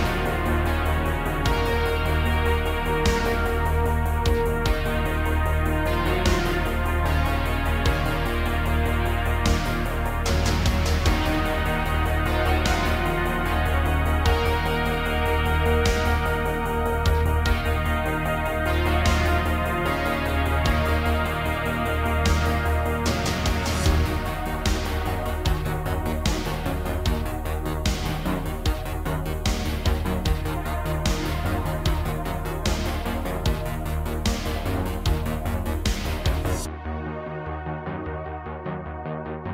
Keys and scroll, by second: 0.0 2, 4.2 shift+s, 9.4 f, 10.3 i, 11.5 s, 13.8 s, 14.2 shift+z, 15.7 Tab, 18.6 Tab, 18.8 s, 19.2 shift+z, 20.7 Tab, 22.5 KP_Divide, 26.4 Tab, 28.5 ctrl+r, 29.9 ctrl+b, 32.8 3, 35.9 e, 36.6 s, 38.6 Tab, 39.4 Tab.